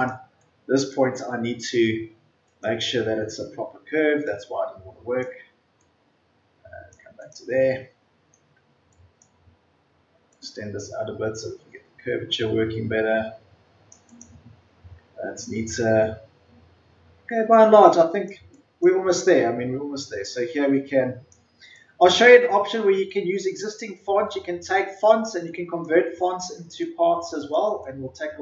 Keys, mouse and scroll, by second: 7.6-8.0 ctrl+scroll down 1, 8.8-14.0 drag, 15.0 ctrl+scroll down 1, 15.2-16.2 ctrl+scroll up 1, 16.8-17.7 ctrl+scroll down 1, 17.7-18.2 scroll up 1.